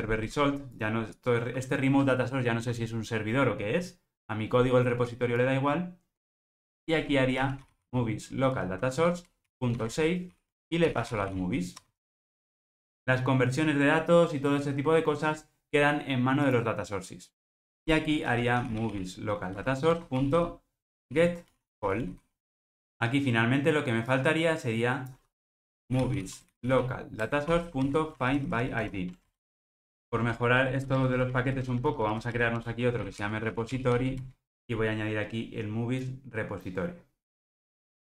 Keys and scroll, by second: 0.2 Escape, 9.1 Return, 15.7 Escape, 19.9 Return, 27.2 Return, 30.0 super+n.